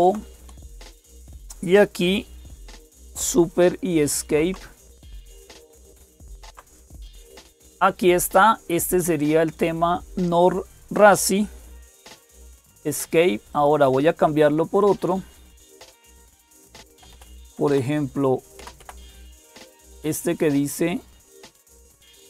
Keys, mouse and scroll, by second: 0.0-22.2 typing, 0.4 Return, 3.9 super+Escape, 12.1 Escape, 13.3 click, 16.5 Left, 16.7 Left, 16.9 Left, 17.1 Left, 17.3 Left, 18.4 Left, 18.6 Left, 19.6 Left.